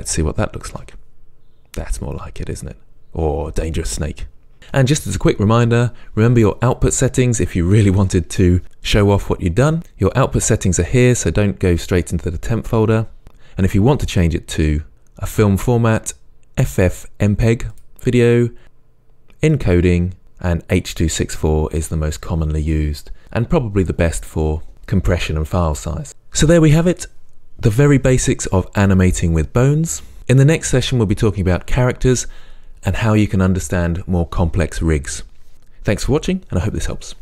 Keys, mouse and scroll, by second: 0.7 space, 4.6 space, 14.9 click, 19.6 click, 20.2-22.9 scroll down 2.